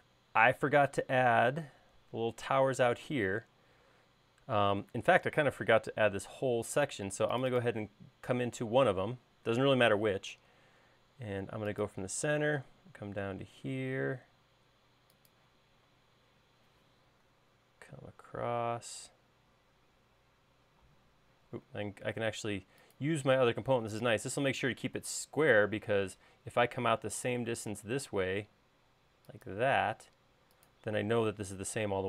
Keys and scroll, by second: 8.7 l, 20.7 i, 21.9 i.